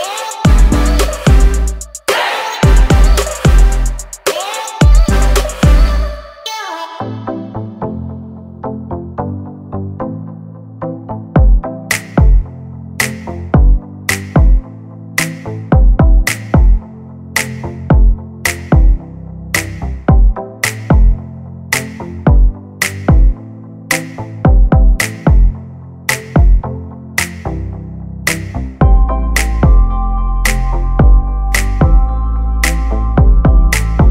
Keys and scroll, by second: 1.4-2.5 typing, 6.5-8.1 typing, 14.7 1, 14.9 0, 15.1 Return, 18.6 space, 18.7 Escape, 27.1 l.